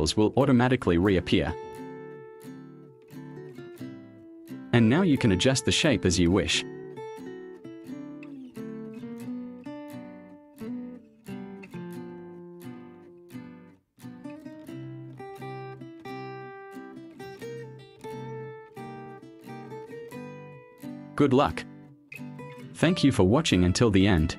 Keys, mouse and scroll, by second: 5.3 a, 11.3 click, 16.5 click, 18.1 click, 21.4 v, 22.2 space.